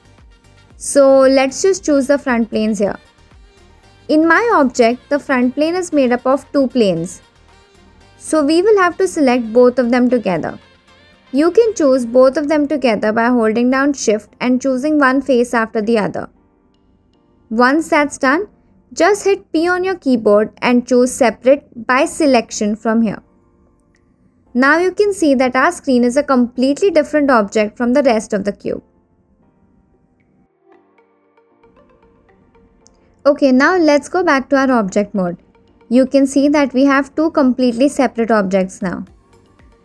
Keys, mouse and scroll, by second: 12.5 click, 16.1 shift+click, 18.8 middle click, 20.1 p, 34.9 Tab, 36.4 Tab, 37.3-37.6 middle drag, 37.8 shift+middle drag, 38.4 click, 38.9 click, 39.4 click.